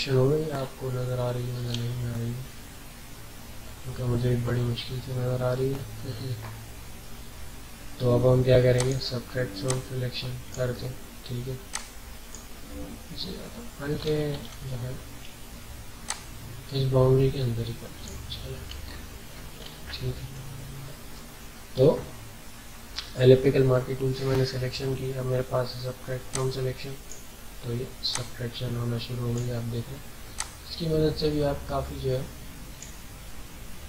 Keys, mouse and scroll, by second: 0.5 alt+scroll up 1, 2.3 scroll down 1, 3.6 alt+scroll down 1, 4.9 alt+scroll down 1, 8.7-14.3 drag, 14.3 ctrl+d, 16.0-18.8 drag, 18.8 alt+scroll up 1, 19.4 alt+scroll up 1, 19.7-21.4 ctrl+scroll down 2, 26.3-33.8 drag.